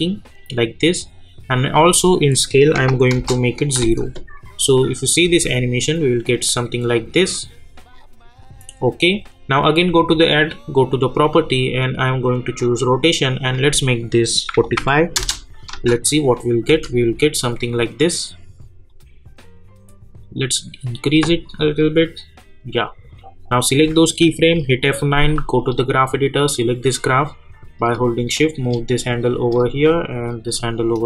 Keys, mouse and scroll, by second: 3.1 Return, 3.8 space, 6.3 scroll up 1, 6.9-9.8 drag, 12.6 click, 15.1 Return, 15.7 space, 18.9-24.5 drag, 24.5 F9, 25.6-29.5 drag, 29.5-31.0 drag.